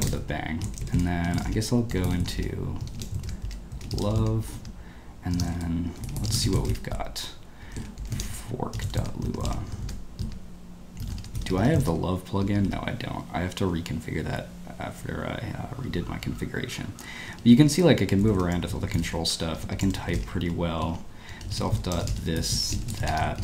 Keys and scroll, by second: 0.1 Escape, 0.1 i, 0.8 ctrl+l, 0.9 ctrl+l, 1.3 Escape, 1.4-9.9 typing, 2.2 Escape, 10.2 Escape, 11.0-13.1 typing, 14.3 ctrl+d, 14.9 ctrl+u, 15.7 ctrl+d, 16.2 ctrl+u, 17.4 ctrl+d, 17.5 ctrl+u, 17.7 ctrl+d, 17.9-23.4 typing.